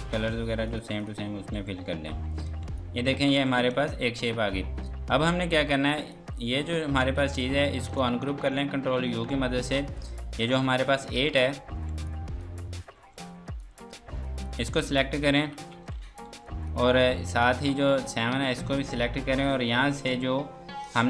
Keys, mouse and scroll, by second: 0.0-0.3 typing, 0.7 click, 1.6 F3, 2.8 click, 3.3 Escape, 3.8 click, 9.7 click, 10.9 z, 11.5 scroll down 1, 11.7 F2, 12.1 click, 13.0 F2, 13.2 click, 16.5 click, 17.4 click, 20.1 click.